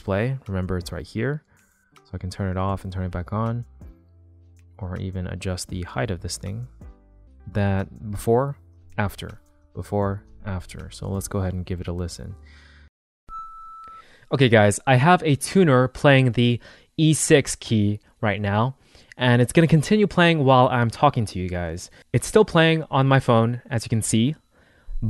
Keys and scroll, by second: 7.9 super+z, 8.6 shift+super+z, 9.5 super+z, 13.0 space.